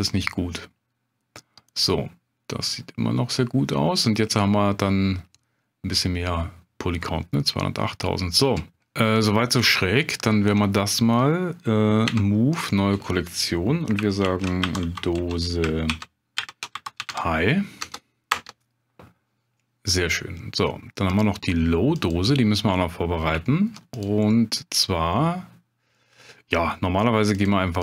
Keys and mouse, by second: 7.3-7.9 middle drag, 12.1 m, 21.1 click, 22.0 click, 23.5 shift+drag, 24.4 middle click, 25.9 drag, 25.9 right drag, 27.3 click.